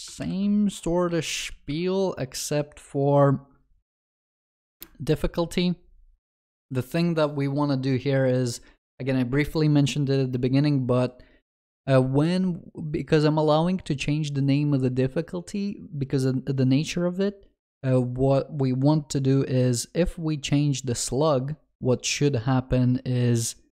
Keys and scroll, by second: 0.3 ctrl+shift+n.